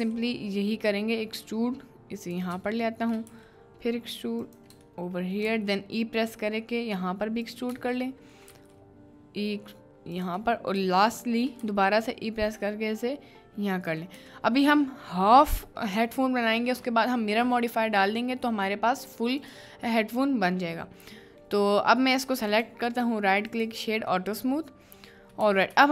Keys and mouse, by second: 0.1 e, 2.2 middle click, 2.8 shift+middle click, 4.4 middle click, 5.0 shift+middle click, 8.1 shift+middle click, 11.2 shift+middle click, 14.3 Tab, 16.1-16.7 shift+middle drag, 17.7-18.2 middle drag, 19.5 click, 20.1-20.7 middle drag, 21.2 middle click, 22.5 click, 22.8-23.6 drag, 24.3-25.2 middle drag, 25.4 Tab.